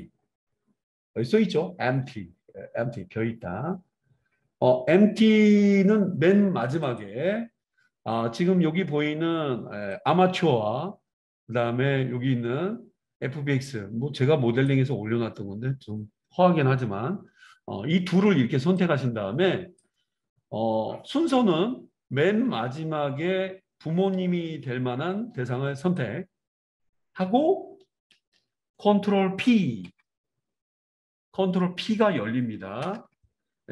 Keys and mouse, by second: 6.8 click, 7.0-10.0 middle drag, 10.0-21.7 drag, 21.7-25.9 right drag, 25.9-33.2 shift+middle drag, 29.8 ctrl+p.